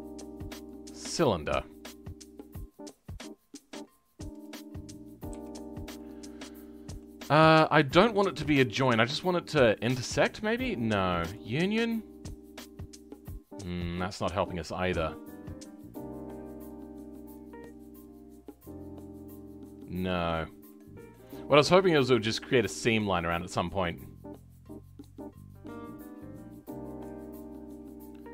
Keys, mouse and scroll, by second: 3.0-3.8 scroll up 2, 3.8-4.4 scroll down 2, 4.4 click, 5.6 scroll up 2, 5.9-7.4 middle drag, 7.4 click, 9.8-12.5 drag, 12.5-16.3 middle drag, 27.7 scroll down 2, 28.0-28.3 middle drag.